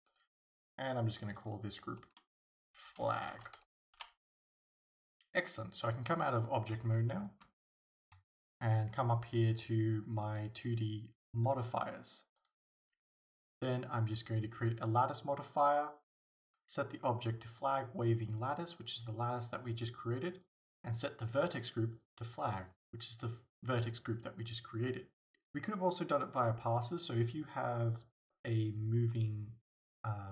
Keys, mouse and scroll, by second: 0.2-7.7 drag, 6.8 Tab, 7.2 scroll down 1, 7.7 shift+middle click, 10.7 click, 12.4-30.3 drag.